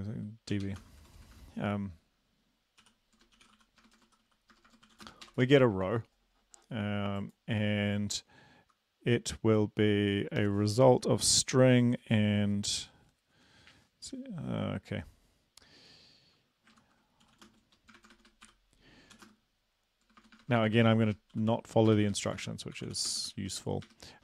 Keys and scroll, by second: 0.6-1.2 typing, 2.9-5.4 typing, 16.7 ctrl+Left, 17.3-24.2 typing.